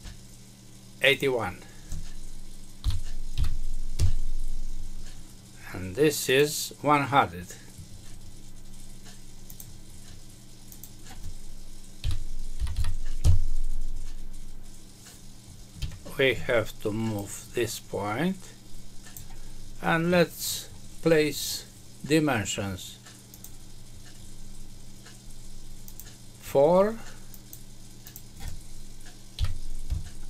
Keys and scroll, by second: 3.9 Return, 13.1 Return, 15.7 Escape, 29.8 Return.